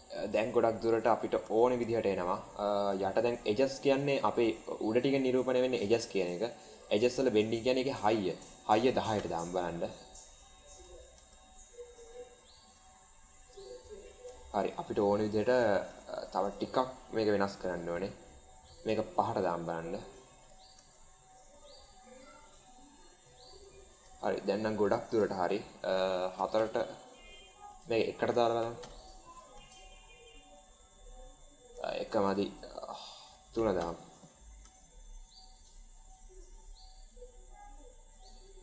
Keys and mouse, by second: 1.3 space, 1.8-2.2 shift+middle drag, 6.6-9.9 drag, 10.8 click, 11.0 space, 14.3 space, 15.7-19.4 drag, 20.4 click, 20.6 space, 24.1 space, 24.7-27.5 drag, 27.6-29.2 drag, 29.5 space, 31.6 space, 32.3-34.1 drag, 34.5 space.